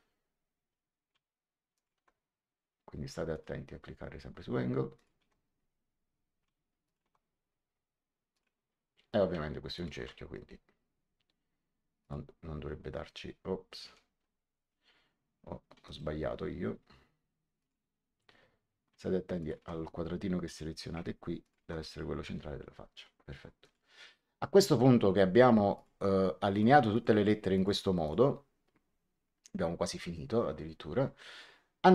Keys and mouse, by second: 1.7 click, 3.2 click, 4.9 click, 6.8 ctrl+click, 8.3 click, 9.7 ctrl+click, 11.9 click, 14.0 ctrl+z, 15.8 right click, 17.5 click, 19.3 ctrl+click, 21.3 ctrl+click, 23.5 click, 25.7 click.